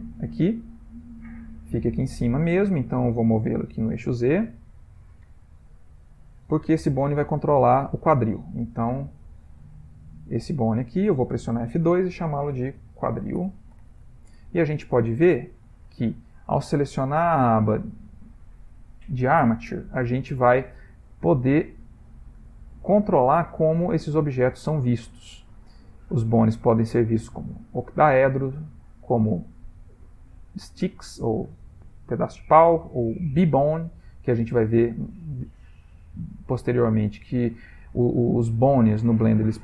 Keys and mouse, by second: 0.8 click, 1.2 shift+middle click, 1.4 shift+middle click, 2.8 click, 3.8 g, 5.3 shift+middle click, 5.4 shift+middle click, 6.1 click, 9.2 g, 10.7 click, 11.8 F2, 15.3 shift+middle click, 17.0 click, 21.8 click, 27.8 click, 31.3 click, 33.8 shift+middle click, 33.8 shift+middle click, 34.3 middle click, 35.3 middle click, 35.5 middle click, 35.6 shift+middle click, 39.3 ctrl+middle click.